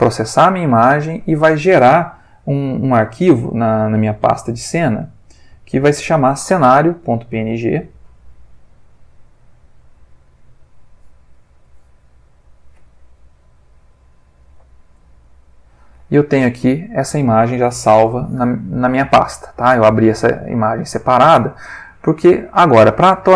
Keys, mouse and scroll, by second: 4.7 click, 7.5 click, 8.6 click, 10.9 click, 11.7 click, 14.6 alt+F10, 15.4-16.8 alt+drag, 18.1 click, 19.4 click, 22.2 click.